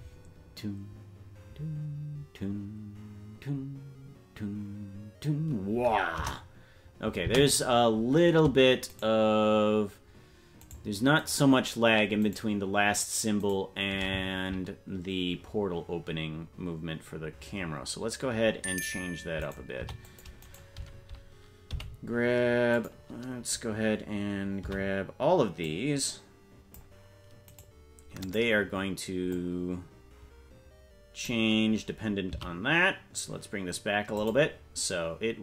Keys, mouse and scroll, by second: 6.2 KP_0, 7.2 space, 9.0 shift+right click, 19.4 right click, 19.8 c, 21.7 g, 24.6 c, 28.2 click, 29.3-31.3 drag, 32.3 s.